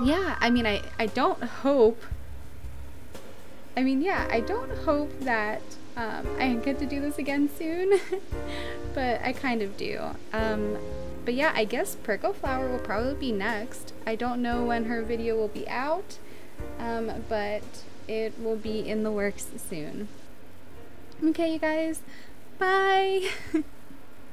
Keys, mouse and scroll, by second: 6.2 right click, 6.5 right click, 7.1 right click.